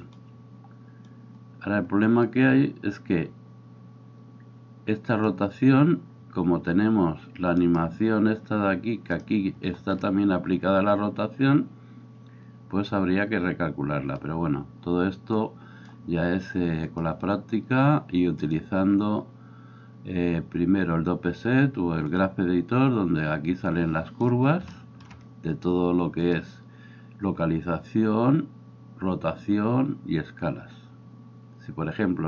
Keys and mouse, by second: 0.2-1.2 middle drag, 1.2-26.3 drag, 7.6 middle click, 7.6 right click, 26.3-32.2 middle drag.